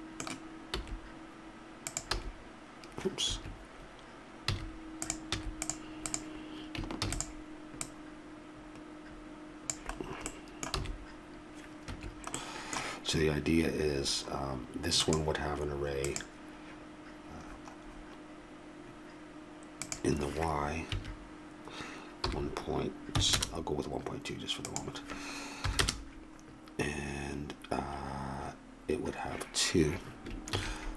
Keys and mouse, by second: 0.6 click, 0.8 s, 2.2 s, 4.5 a, 5.0 click, 5.3 x, 7.0 shift+d, 10.8 s, 14.2 middle click, 15.9 click, 30.5 ctrl+a.